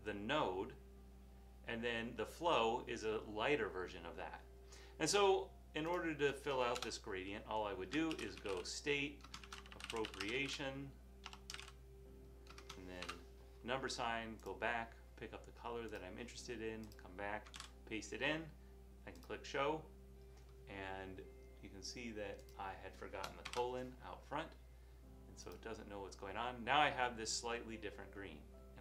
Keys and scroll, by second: 6.9 Return, 8.2-12.3 typing, 14.3-16.6 typing, 17.6 super+v, 23.6 :, 26.6 typing.